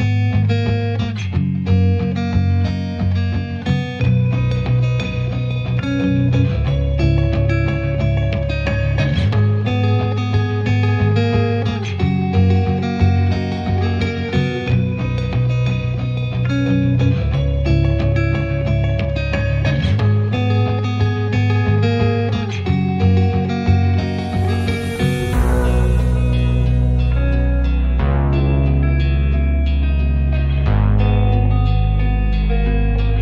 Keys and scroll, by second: 6.0 Return, 7.1 space, 7.5 e, 8.0 space, 9.9 m, 11.5 Return, 13.4 Return, 14.3 ctrl+Left, 16.3 space, 16.6 l, 17.3 space, 17.9 m, 19.0 Up, 19.8 space, 20.1 p, 21.6 space, 21.9 l, 24.8 space, 25.2 p, 26.5 space, 27.3 m, 29.5 Return, 30.4 p, 31.7 Return, 32.1 space.